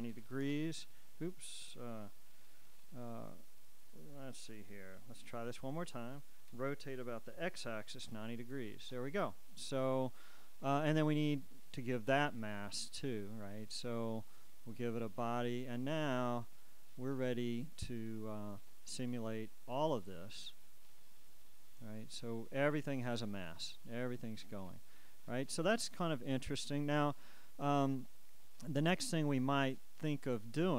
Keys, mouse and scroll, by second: 2.6 shift+9, 2.8 shift+Return, 2.8 shift+Escape, 5.5 alt+r, 6.7 r, 7.5 x, 8.3 0, 8.9 Return, 12.5-15.0 right drag, 15.0-16.6 middle drag, 16.8 click, 19.8 click, 21.0 click.